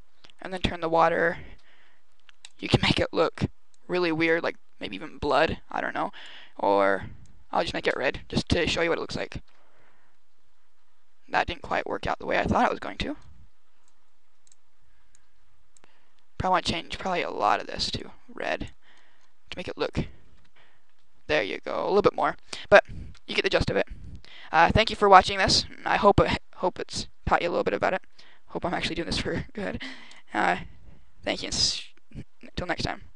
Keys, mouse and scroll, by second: 0.3 right click, 1.5 scroll up 1, 2.3 click, 7.8 click.